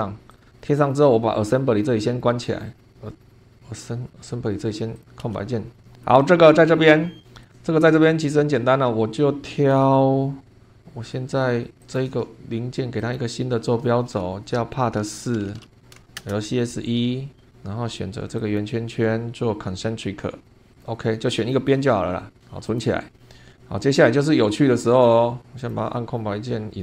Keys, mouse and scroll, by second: 0.4 click, 0.6 scroll down 1, 1.5-2.0 scroll down 2, 2.2-2.8 scroll down 4, 3.5 scroll up 2, 5.0 click, 5.2 space, 5.7 scroll down 1, 5.9 shift+click, 6.3 shift+click, 6.7 shift+scroll up 1, 7.4-9.9 drag, 10.5 click, 11.8 click, 13.0 click, 14.6 Home, 15.1-16.6 typing, 17.4 middle click, 18.4 click, 20.4 click, 20.8 click, 22.6 click, 25.0 click, 25.6 click, 25.9 space, 26.1 scroll down 1.